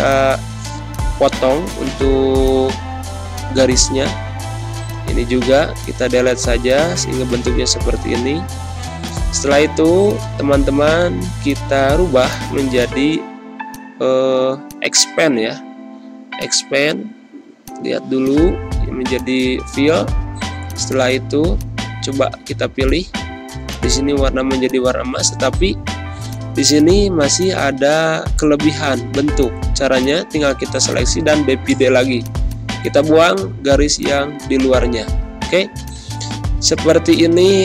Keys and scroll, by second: 7.9 Delete, 11.1 ctrl+z, 24.4 z, 25.2 space, 27.2 space, 33.3 Delete, 34.8 ctrl+-, 35.0 ctrl+0, 35.6 space.